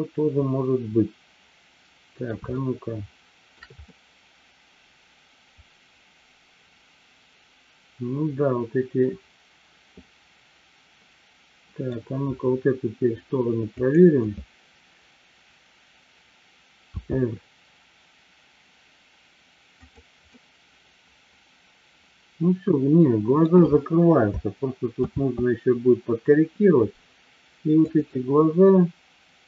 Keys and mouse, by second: 2.6-3.6 shift+middle drag, 3.8-12.0 middle drag, 13.7 click, 20.5-23.5 middle drag, 25.5 ctrl+z, 27.8-29.4 drag.